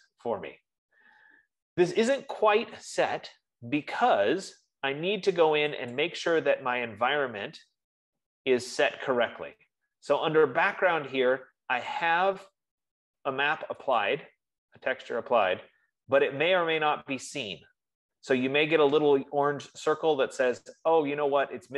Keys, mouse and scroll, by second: 3.1 F15, 6.8 click, 8.3-11.5 drag, 14.6-19.5 drag.